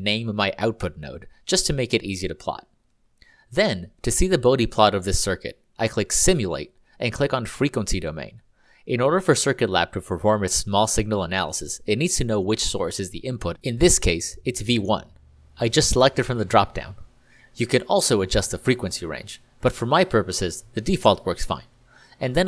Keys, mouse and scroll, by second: 0.5 Delete, 2.1 n, 2.8 click, 4.0-4.8 typing, 6.3 click, 16.0 click.